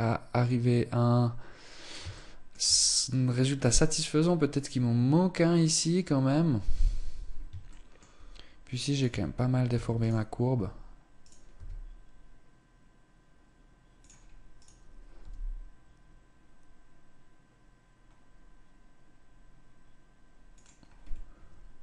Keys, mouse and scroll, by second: 1.6 shift+middle click, 5.9-6.8 scroll up 1, 6.8-7.1 scroll up 1, 7.1 shift+middle click, 8.2 right click, 8.6 Tab, 9.2 Tab, 9.4 right click, 10.0 Tab, 10.7 right click, 11.0 s, 14.0 right click, 14.6 g, 20.5-21.8 scroll down 1.